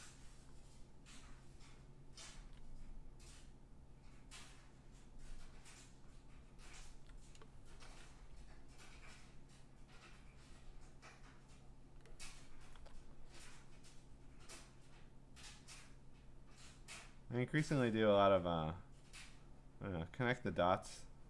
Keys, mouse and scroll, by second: 0.5 click, 1.7 click, 2.3 ctrl+z, 4.8 click, 5.6 click, 6.5 click, 6.9 ctrl+z, 8.1 ], 8.4 ], 11.9 click, 12.7 ctrl+z, 14.8 click, 15.9 click, 17.2 click, 19.0 click.